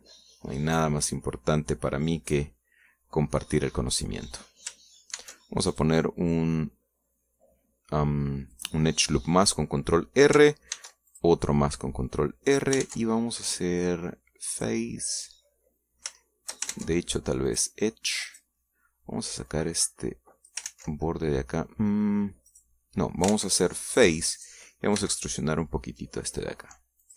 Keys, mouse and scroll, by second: 0.5-2.5 middle drag, 2.6 scroll down 2, 3.1 scroll up 1, 3.6 middle click, 4.5 scroll down 2, 4.7 scroll up 2, 4.9-5.5 scroll down 2, 6.0 ctrl+r, 6.5 ctrl+click, 9.3 click, 11.5 ctrl+r, 11.9 ctrl+click, 13.3 ctrl+click, 13.6 ctrl+Tab, 15.3 click, 16.0 right click, 16.3 middle click, 17.5 ctrl+shift+middle click, 17.5 ctrl+shift+Tab, 18.3 click, 19.1 right click, 20.3-21.5 drag, 21.5 ctrl+z, 23.3 right click, 24.1 ctrl+Tab, 24.7 click, 25.1 right click, 25.8 e.